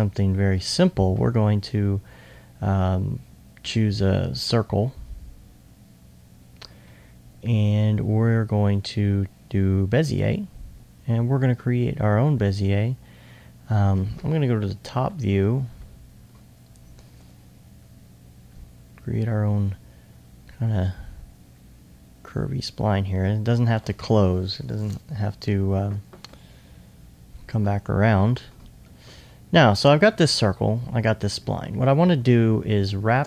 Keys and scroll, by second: 15.1-16.3 typing.